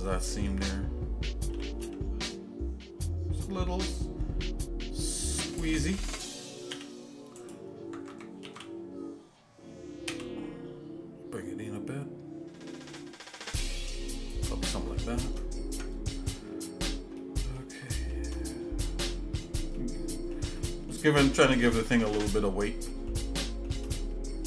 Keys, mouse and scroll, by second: 1.5 s, 6.9 e, 8.5 alt+s, 14.9 shift+middle click, 15.7 Tab, 16.4 shift+middle click, 17.2 shift+middle click, 17.9 shift+middle click, 18.5-18.9 scroll down 2, 19.1 middle click, 19.7 shift+middle click, 20.6 middle click, 21.3 shift+middle click, 21.8 middle click, 22.4 middle click, 22.9 middle click, 23.4 shift+middle click, 24.0 middle click.